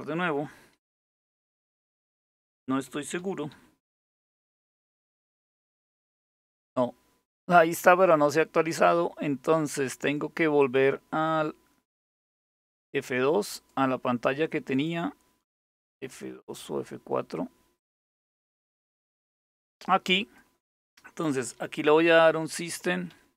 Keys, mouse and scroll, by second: 0.3-3.7 typing, 3.9 Return, 10.2 click, 11.7 click, 13.2 click, 14.4 click, 17.4 click, 18.6 click, 19.8 click, 21.6-23.3 typing.